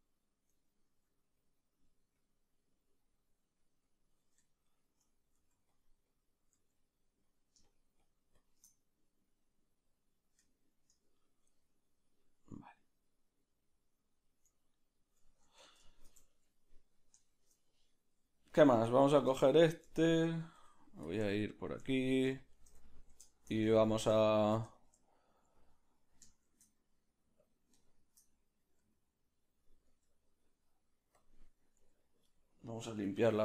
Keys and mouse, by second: 0.7 ctrl+middle click, 1.4-4.5 drag, 4.5-6.1 shift+middle drag, 5.3 f, 6.1-10.5 drag, 6.5 f, 10.5-18.5 shift+middle drag, 15.6 Tab, 18.5 right click, 19.4-26.4 shift+middle drag, 21.1 q, 21.2 q, 26.4 shift+d, 27.8 shift+middle click, 28.9 r, 31.2 q, 31.8 r, 33.2 alt+r.